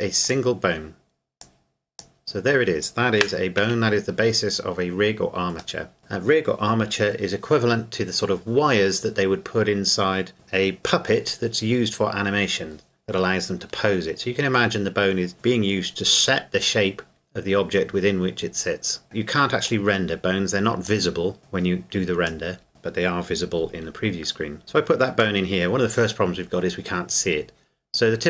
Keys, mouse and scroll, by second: 0.2 click, 3.6 KP_Decimal, 4.4-5.8 scroll down 1, 5.8 middle click, 6.0-8.1 scroll down 1, 8.1-8.4 scroll down 1, 18.3-19.7 scroll down 1, 19.7 click, 24.6 click.